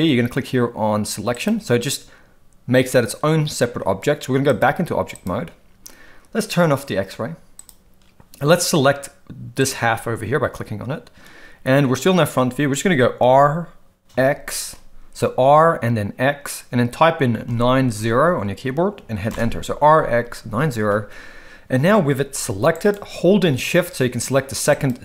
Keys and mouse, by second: 4.5-5.3 drag, 7.6 click, 9.6 click, 13.2 r, 22.3 g.